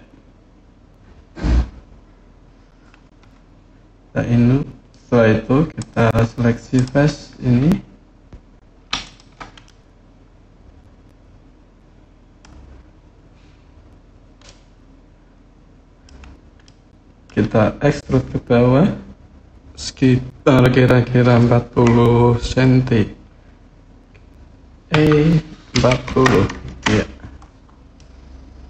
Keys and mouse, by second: 5.5 click, 6.5 click, 8.8 shift+click, 9.4-12.2 middle drag, 14.2-15.8 middle drag, 16.4 middle click, 24.7 e, 25.5 KP_4, 25.8 KP_0, 26.5 KP_Enter, 27.8-28.6 middle drag.